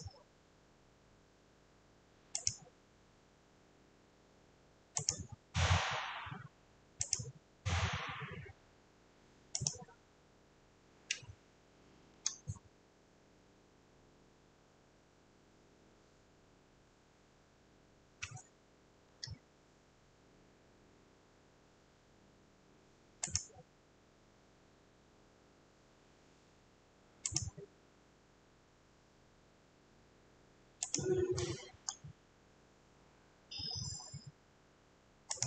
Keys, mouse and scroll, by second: 1.2 click, 1.2 scroll, 2.6 click, 7.2 click, 9.7 click, 12.1 F8, 13.3-14.9 drag, 19.1 F10, 23.4-28.4 drag, 31.0 click, 32.1 scroll, 35.4 click.